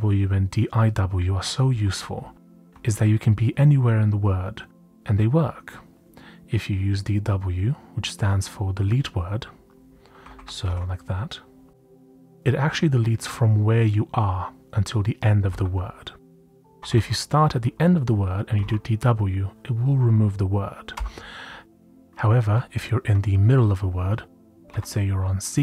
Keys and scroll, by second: 0.0-0.3 typing, 1.7-2.1 typing, 9.9-11.1 typing, 15.4 typing, 16.5-17.0 typing, 18.3-19.1 typing, 20.9-23.0 typing, 24.2-25.6 typing.